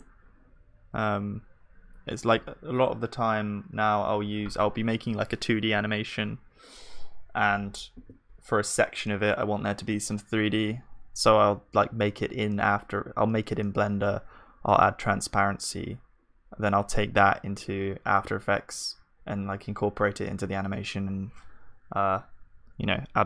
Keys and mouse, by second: 0.0-23.2 drag.